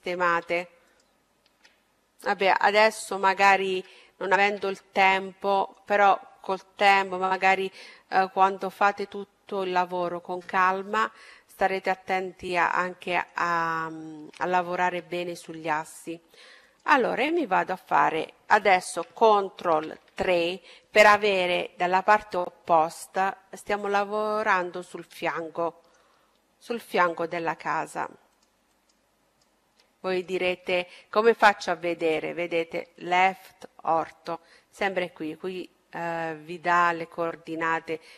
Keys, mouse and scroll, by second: 2.6 ctrl+z, 3.4 ctrl+z, 4.2-6.1 middle drag, 6.3 a, 11.4-13.3 middle drag, 13.3-14.2 scroll up 1, 14.2-15.6 middle drag, 15.6-17.5 right drag, 18.7 ctrl+KP_3, 23.0-26.2 middle drag, 26.3-31.3 right drag.